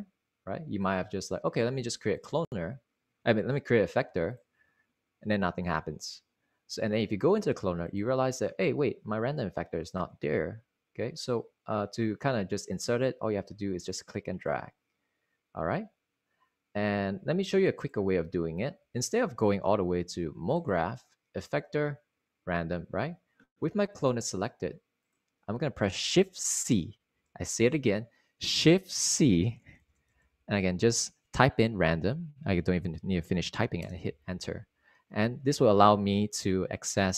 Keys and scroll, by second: 19.4 super+x, 27.2 c, 30.0-31.2 typing, 34.3 Return.